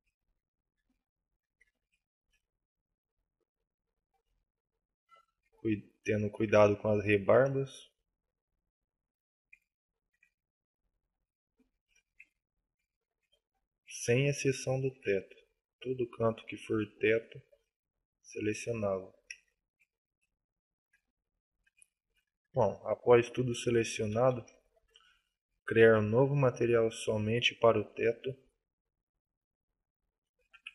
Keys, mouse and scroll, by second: 1.5 KP_7, 2.2 c, 6.4 shift+right click, 6.6 shift+middle click, 7.3 c, 9.2 click, 9.6 shift+middle click, 10.4 middle click, 11.7 shift+f, 12.1 click, 12.2 shift+middle click, 12.9-13.3 scroll up 2, 13.3 shift+middle click, 14.6 alt+shift+right click, 15.0 middle click, 16.9 alt+shift+right click, 17.2 shift+middle click, 18.5 alt+shift+right click, 18.9 shift+middle click, 19.4-20.1 scroll up 4, 20.6 alt+shift+right click, 21.6 KP_7, 22.0 KP_5, 22.3 KP_5, 23.3 KP_5.